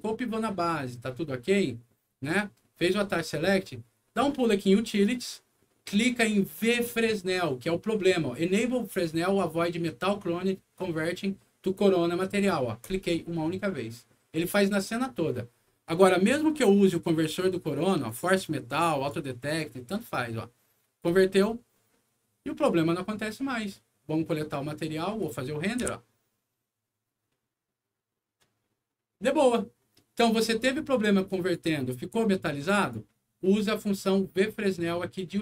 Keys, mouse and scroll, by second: 4.9 click, 12.8 click, 18.0 click, 18.8 click, 21.0 click, 25.2 click, 25.8 F9, 31.2 click, 32.7 click.